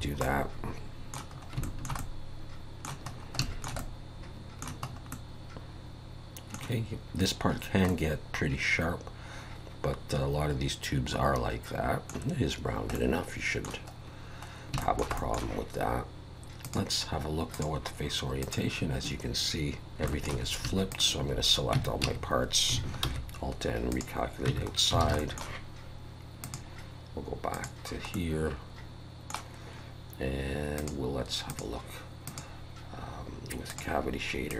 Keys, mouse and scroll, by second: 0.0 scroll down 3, 0.2 middle click, 1.4 scroll up 2, 1.6 shift+middle click, 2.0 middle click, 3.1 scroll up 2, 3.4 shift+middle click, 3.8 middle click, 4.9 scroll up 2, 5.1 middle click, 7.6 scroll down 1, 7.9 middle click, 12.7 scroll down 1, 12.9 middle click, 14.0-14.6 scroll down 5, 14.8 shift+middle click, 15.2 middle click, 16.6 click, 18.4 click, 19.9 middle click, 19.9 scroll up 2, 20.1 shift+middle click, 20.9 shift+click, 21.8 Tab, 22.0 a, 23.0 alt+n, 24.5 Tab, 24.7-25.0 scroll down 2, 25.0 alt+a, 25.2 middle click, 26.4 click, 28.1 middle click, 30.8 click, 31.5 click, 32.3 click.